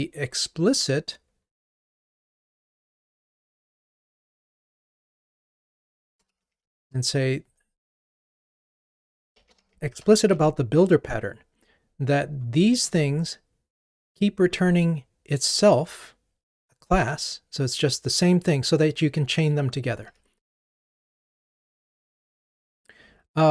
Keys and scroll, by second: 10.3 Escape, 20.1 ctrl+r.